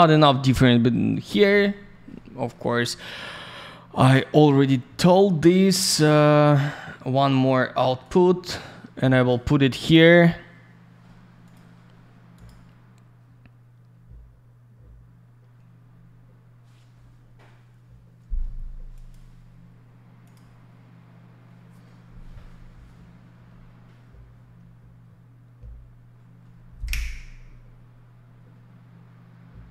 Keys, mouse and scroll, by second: 0.9 middle click, 1.1 middle click, 1.8 scroll up 1, 2.1 middle click, 3.9 click, 5.5 middle click, 8.0 click, 11.4 click, 11.5 click, 12.3 click, 12.4 click, 18.9 click, 19.1 click, 20.2 click, 20.3 click.